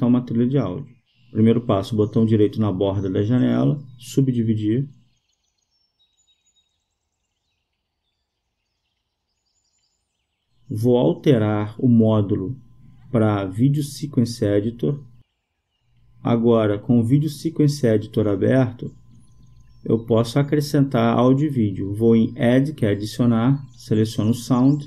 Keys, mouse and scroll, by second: 4.9-6.2 right drag, 9.3-11.5 drag, 15.3-16.8 drag, 17.5 middle click, 18.8-20.3 drag, 24.5 click.